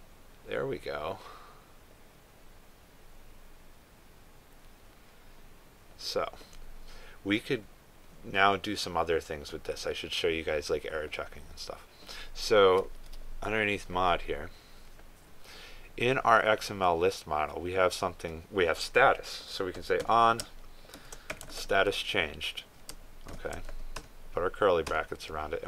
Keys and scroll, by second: 22.5 ctrl+space.